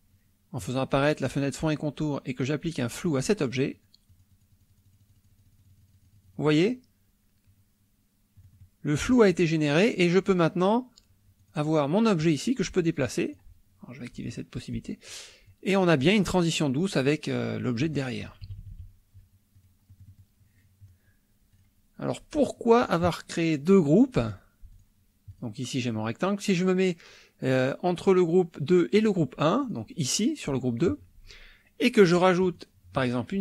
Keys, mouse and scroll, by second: 3.2 click, 3.7 click, 4.1-6.6 drag, 8.4 middle click, 11.4 click, 12.2 click, 13.0 click, 14.1 click, 14.8-15.3 drag, 15.5-16.4 drag, 17.8 click, 18.3 KP_Subtract, 19.5 click, 19.9 click, 21.5 click, 23.7 click, 24.7 click, 25.3 click, 27.9 click, 29.0 click, 29.6 click, 32.5 click.